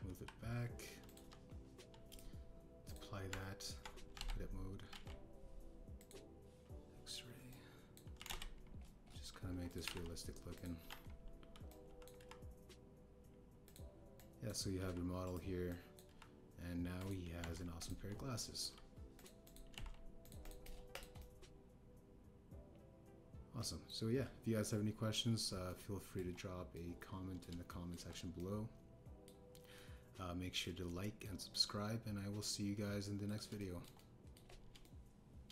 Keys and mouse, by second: 0.3 KP_3, 0.7 g, 1.0 y, 2.0 click, 2.1 KP_1, 3.0-3.9 drag, 4.2 Tab, 5.1 alt+z, 5.8 alt+z, 6.9 click, 8.4 click, 9.1 s, 9.2 x, 10.8 g, 10.8 z, 11.7 KP_3, 12.6 click, 13.1 g, 14.6 click, 15.1 click, 15.7 g, 16.2 click, 16.6 click, 17.0 g, 18.3 Tab, 18.7 click, 18.9 KP_1, 20.1 click, 20.4 click, 20.6 g, 20.7 z, 21.2 drag, 21.4 click, 21.9 click, 22.1-24.8 middle drag, 26.6-27.1 shift+middle drag, 27.7 middle click, 28.6 shift+middle click, 29.3 middle click, 30.7 middle click, 31.8 shift+middle click.